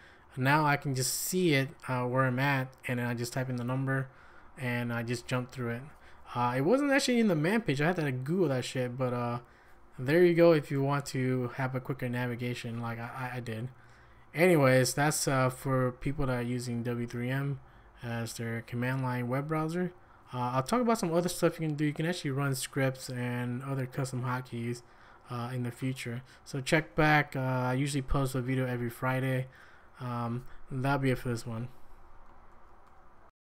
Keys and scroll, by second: 0.5 q, 32.5 ctrl+a, 32.9 1.